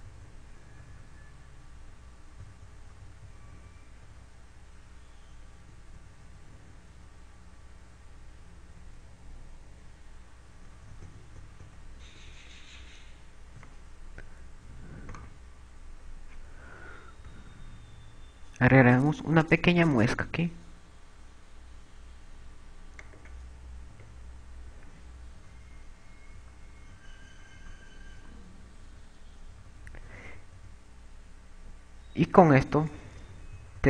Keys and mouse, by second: 0.3-2.8 typing, 3.9-5.6 typing, 7.1 KP_4, 10.9 KP_4, 12.5 KP_4, 12.6 KP_2, 13.5 Tab, 15.3 a, 16.7 right click, 18.9 e, 24.3 click, 25.6 Tab, 26.9-33.8 typing.